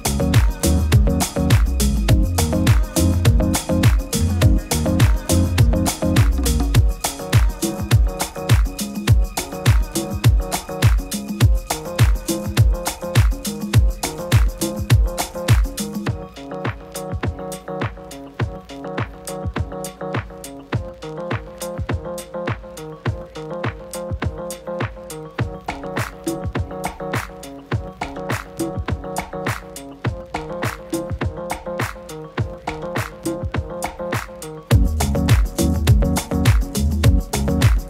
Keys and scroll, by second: 3.6 super+s.